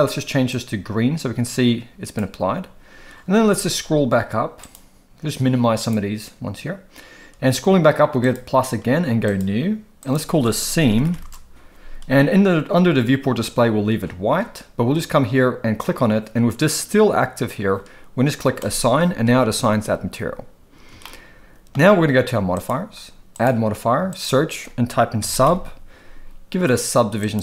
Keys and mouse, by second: 4.6 click, 5.8 click, 9.2 click, 10.0-11.2 drag, 18.6 click, 21.1-21.7 shift+middle drag, 22.5 click, 23.4-27.4 drag.